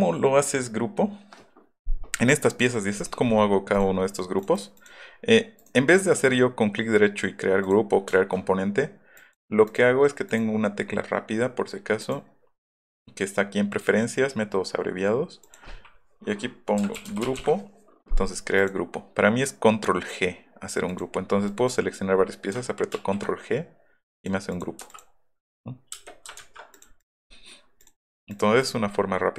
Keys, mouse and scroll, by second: 2.7 middle click, 3.0 click, 3.7 click, 4.4 click, 4.6 right drag, 4.8 right click, 5.6 right click, 7.6 click, 8.0 middle click, 8.1 shift+middle click, 9.2 middle click, 9.7 middle click, 15.4 click, 16.6-17.9 typing, 20.9 click, 21.5 click, 23.0 ctrl+g, 24.2 click, 24.5 click, 24.9 click, 26.0 space, 26.4 ctrl+z, 28.3-28.7 scroll down 4, 28.9-29.2 scroll up 4.